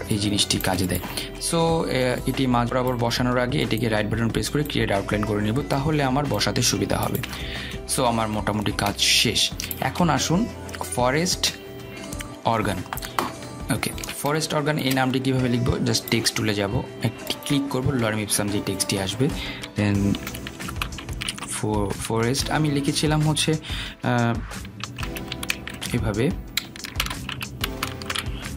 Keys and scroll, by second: 23.2 BackSpace.